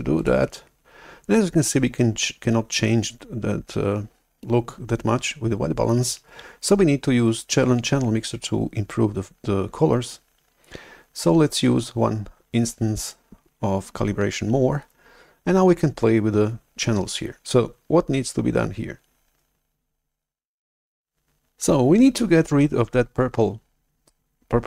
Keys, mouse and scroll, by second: 13.1-15.5 right drag.